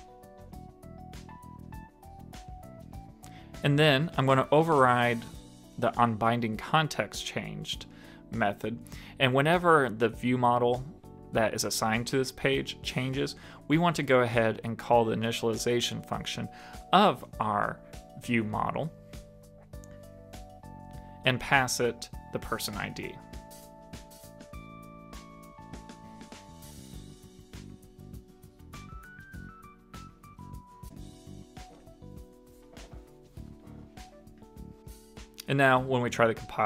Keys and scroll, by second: 3.0 super+s, 6.3 super+Right, 11.2 super+Right, 15.8 shift+super+Left, 31.9 super+s.